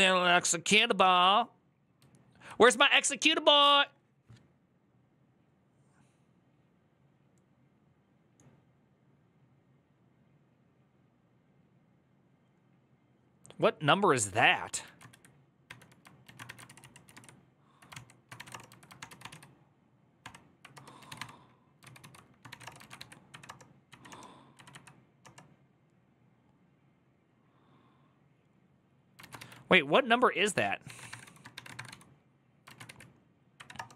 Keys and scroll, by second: 0.5-1.3 typing, 14.6 ctrl+a, 15.2-16.2 typing, 16.0 ctrl+a, 16.4 ctrl+c, 16.6 ctrl+c, 17.9-18.7 typing, 18.8 ctrl+d, 18.9 ctrl+u, 20.5-24.9 typing, 21.6 ctrl+u, 21.8 ctrl+u, 23.1 Up, 23.2 Return, 23.7 Return, 23.7 Up, 23.9 Return, 25.0 Return, 29.0 ctrl+a, 29.2 1, 30.4-33.1 typing, 33.3 Up, 33.5 Return, 33.9 Up.